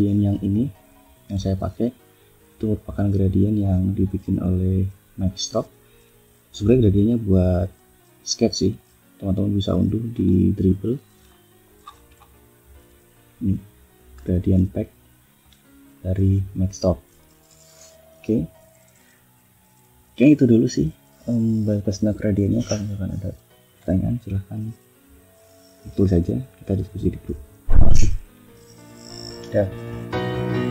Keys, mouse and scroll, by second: 1.2 ctrl+scroll up 2, 1.7 ctrl+scroll down 2, 2.7 scroll down 2, 8.6 click, 9.5 click, 10.0 scroll up 1, 11.1 scroll down 1, 11.7-12.3 scroll up 1, 14.3-15.5 drag, 17.8 click, 19.7 click, 20.6 click.